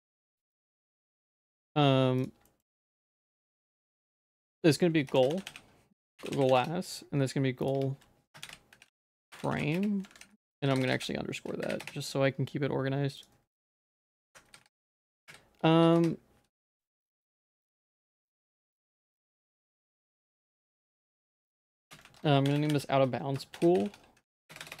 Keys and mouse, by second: 0.4 middle click, 0.9 middle click, 1.2 middle click, 2.5 shift+middle click, 3.1 ctrl+s, 3.2 middle click, 3.7 shift+middle click, 4.0 middle click, 4.4 F2, 6.4 s, 7.7 F2, 10.1 ctrl+s, 10.4 F2, 10.4 3, 10.7 Right, 10.8 Right, 10.9 Right, 13.2 click, 13.5 F2, 14.6 Left, 14.8 Left, 17.2 ctrl+s, 17.5 click, 18.6 g, 19.8 F2, 21.8 BackSpace, 22.5 shift+o, 23.8 o, 24.5 BackSpace, 24.6 BackSpace, 24.7 BackSpace.